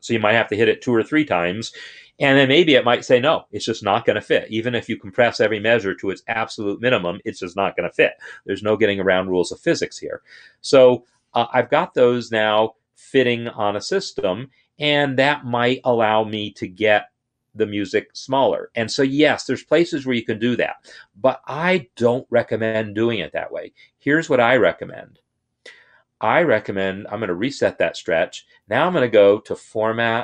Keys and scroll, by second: 10.3 shift+[.